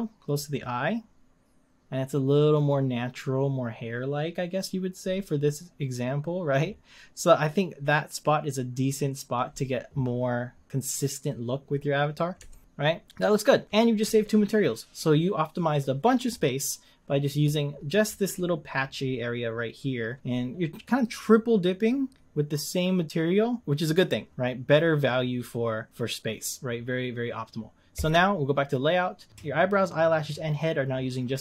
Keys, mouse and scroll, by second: 2.7 scroll down 1, 12.5-25.3 ctrl+middle drag, 25.3 scroll down 11, 25.9-27.8 scroll up 1, 28.0 click, 28.7-29.3 scroll down 1, 29.3-30.7 scroll up 1.